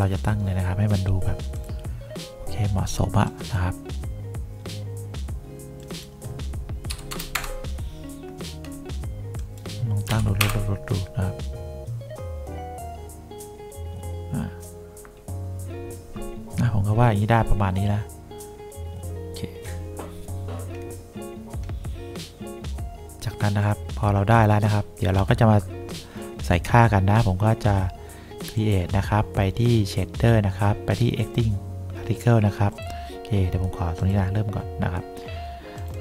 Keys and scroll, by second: 6.8-7.7 typing, 10.2 7, 10.5 Return.